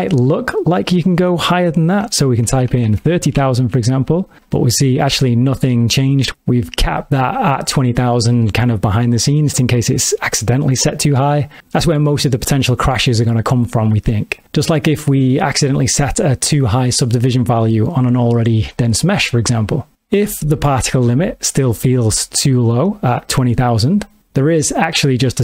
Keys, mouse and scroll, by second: 1.5 click, 2.7 KP_0, 3.0 KP_0.